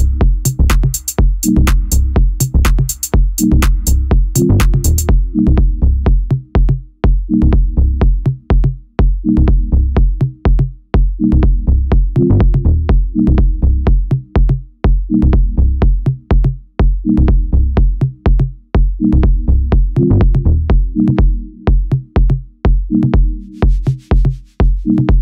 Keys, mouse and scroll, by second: 0.3 alt+middle click, 3.7 click, 4.9 z, 6.7 click, 7.3 click, 7.8 click, 8.2 click, 8.7 shift+click, 9.1 alt+middle click, 9.4 alt+middle drag, 9.9-10.3 scroll up 4, 10.3 alt+middle click, 10.7 scroll up 2, 11.0 s, 12.4-16.1 typing, 20.7 middle drag, 21.0-21.4 scroll down 2, 21.4 middle click, 21.6 ctrl+a, 22.9 o.